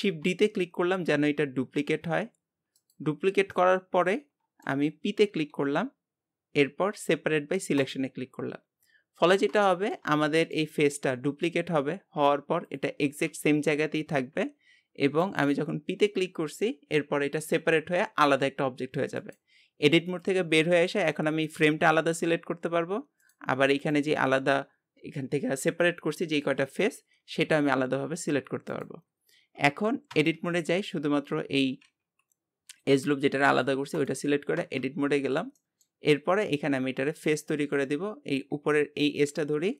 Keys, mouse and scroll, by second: 0.0 shift+d, 3.5-5.2 middle drag, 5.2 p, 9.2-9.6 scroll up 2, 9.6-10.8 shift+middle drag, 10.8-11.1 scroll up 1, 11.1 shift+middle click, 11.7-12.2 scroll up 1, 12.2 Tab, 12.6 click, 13.3 g, 20.1 click, 20.7 g, 23.8-26.8 drag, 27.2 g, 29.0 scroll down 2, 30.1 Tab, 30.5 scroll down 1, 31.1 Tab, 31.4 scroll up 3, 31.9 g, 34.6 Tab, 34.9 scroll down 3, 35.6-37.7 middle drag, 37.7 click, 38.1 scroll up 1, 39.3 click, 39.6 scroll down 2.